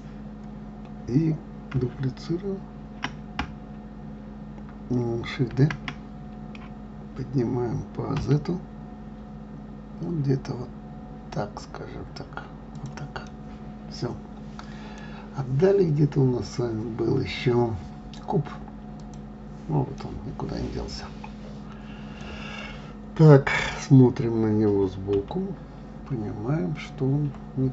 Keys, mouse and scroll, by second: 5.9 shift+d, 13.6-16.6 middle drag, 19.4 click, 20.3-23.4 middle drag, 25.5 KP_3.